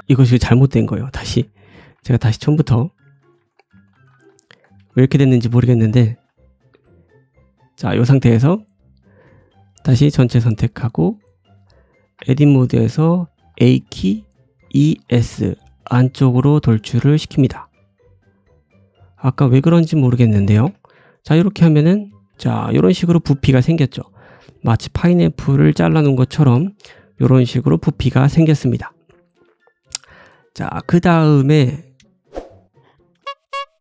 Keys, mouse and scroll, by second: 0.7 ctrl+z, 0.9 ctrl+z, 1.2 ctrl+z, 1.6 ctrl+z, 1.9 ctrl+z, 1.9-5.6 ctrl+drag, 2.2 ctrl+z, 2.4 ctrl+z, 2.7 ctrl+z, 2.9 ctrl+z, 3.1 ctrl+z, 3.5 ctrl+z, 3.7 ctrl+z, 4.0 ctrl+z, 4.2 ctrl+z, 4.5 ctrl+z, 4.9 ctrl+z, 5.1 ctrl+z, 5.2 ctrl+z, 5.6 ctrl+z, 5.8 ctrl+z, 6.0 click, 6.3 click, 6.6 g, 7.2 middle click, 8.0 ctrl+z, 8.2 middle click, 8.7-9.6 scroll down 2, 9.6 click, 9.6 scroll down 1, 10.0 right click, 10.4 middle click, 10.7-11.5 scroll up 3, 11.0 middle click, 11.5 middle click, 12.1 Tab, 12.4-19.3 right drag, 12.4 middle click, 13.5 a, 14.5 e, 19.3-23.5 middle drag, 20.6 Tab, 21.1 scroll down 1, 21.2 click, 21.7 g, 23.8 middle click, 24.2-26.1 middle drag, 26.5 ctrl+z, 27.2 middle click, 28.9-29.4 scroll down 3, 29.6-30.2 scroll up 3, 30.1-33.2 shift+drag, 30.2 shift+middle click, 30.4-31.2 shift+scroll down 3, 31.8 middle click, 31.8 right click, 31.9 s, 32.2 g.